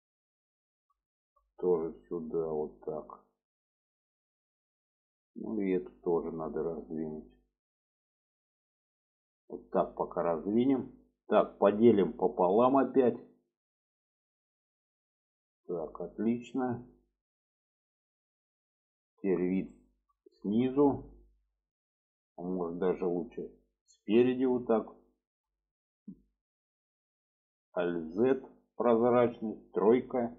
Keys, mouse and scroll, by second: 1.2 shift+middle drag, 2.3 click, 4.4 middle click, 6.0 click, 6.4 middle click, 7.9-9.6 drag, 9.9 click, 10.8 shift+middle click, 11.6 middle click, 12.3 shift+middle drag, 13.5 click, 15.1 click, 16.4 middle click, 17.8 click, 18.2-19.4 middle drag, 19.7 shift+middle click, 20.4 shift+middle click, 23.1 middle click, 24.5 shift+middle click, 25.3 shift+middle click, 28.6 alt+z, 29.8 3.